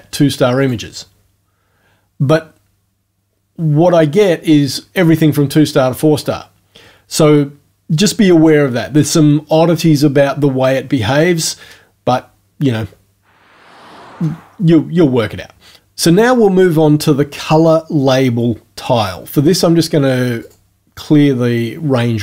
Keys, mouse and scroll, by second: 0.6 click, 20.4 click.